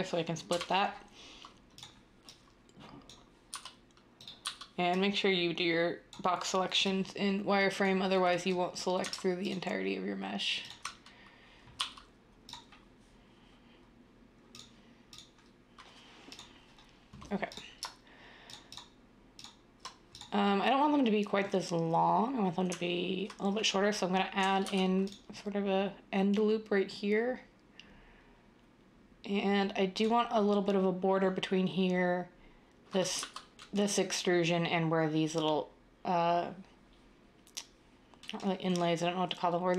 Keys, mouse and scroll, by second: 0.5 7, 3.5-4.4 typing, 11.8 x, 24.6 ctrl+r, 33.1 z.